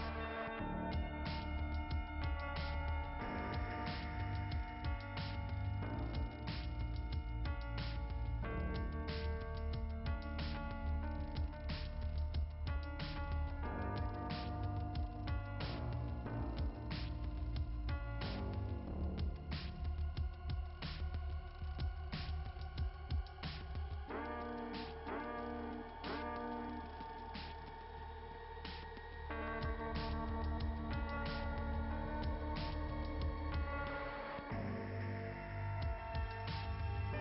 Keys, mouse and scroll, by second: 0.1 click, 3.0 click, 3.7 click, 6.3 click, 9.2 click, 10.4 click, 14.4 click, 17.4 click, 18.1 click, 20.0 click, 21.1 click, 30.8 click, 36.6 click, 36.8 click, 37.1 click.